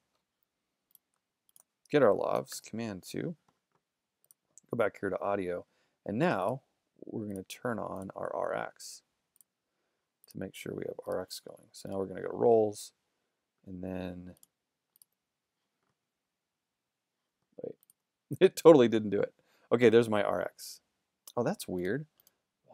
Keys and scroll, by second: 0.0-0.4 typing, 2.5 shift+super+2.